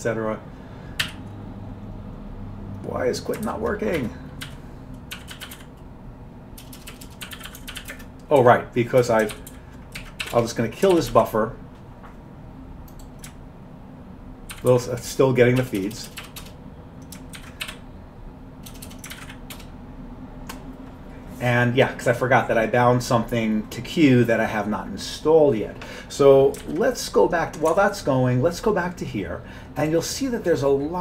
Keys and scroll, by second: 1.0 typing, 3.5-8.4 typing, 4.0 Escape, 9.4 ctrl+g, 9.5 ctrl+g, 10.0 ctrl+x, 10.2-11.2 typing, 11.0 ctrl+g, 14.6 ctrl+g, 14.6-16.6 typing, 14.7 ctrl+g, 17.4 ctrl+x, 17.7 k, 18.8-19.3 typing, 19.2 ctrl+x, 19.6 Return, 26.6 ctrl+x, 27.7 alt+Tab.